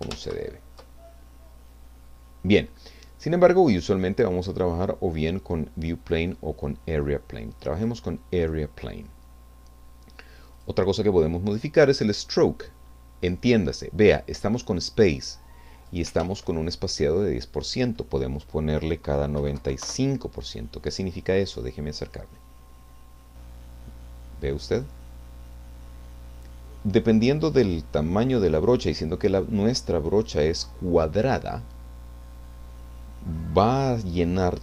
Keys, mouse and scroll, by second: 0.4 ctrl+z, 3.3 click, 7.7 click, 10.5 click, 11.9 click, 15.3 click, 16.2 ctrl+z, 17.7 click, 19.1-20.1 typing, 21.3-21.9 scroll up 2, 21.5 middle click, 22.3-25.0 drag.